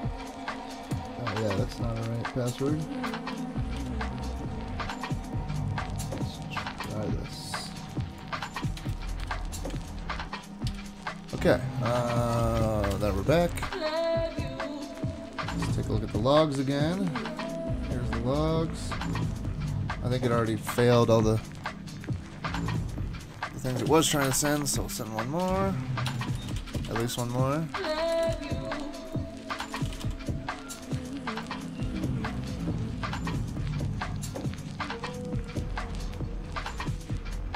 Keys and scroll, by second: 15.6 super+Tab, 15.8 super+Tab, 20.4 super+k, 23.5-30.6 typing.